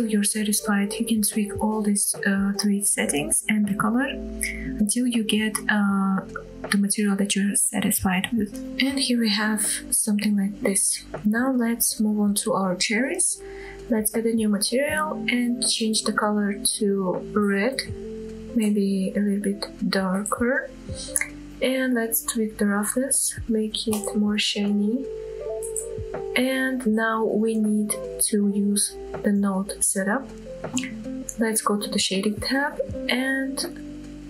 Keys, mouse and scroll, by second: 8.6 click, 9.5-9.9 middle drag, 10.0-10.6 scroll up 2, 10.6-11.1 middle drag, 11.2 shift+middle click, 11.7 middle click, 12.2 click, 12.7-13.0 middle drag, 13.9 click, 15.0-15.6 drag, 23.9-27.8 drag, 28.5-28.9 scroll down 2, 29.7-30.1 shift+middle drag, 30.2-30.8 middle drag, 31.0-31.3 scroll up 2, 31.5 shift+middle drag, 32.1 middle click.